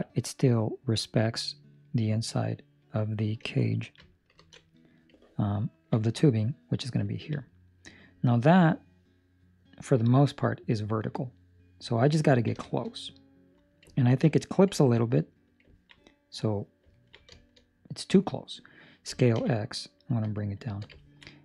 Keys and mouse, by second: 5.5 ctrl+middle click, 5.9 middle click, 7.2 ctrl+middle click, 7.3 middle click, 9.6 middle click, 12.1 ctrl+middle click, 12.5 shift+middle click, 12.8 middle click, 13.9 ctrl+middle click, 14.7 middle click, 15.0 middle click, 15.6 ctrl+middle click, 15.9 middle click, 16.9 ctrl+middle click, 17.2 shift+middle click, 17.5 middle click, 19.0 s, 20.9 ctrl+middle click, 21.1 middle click.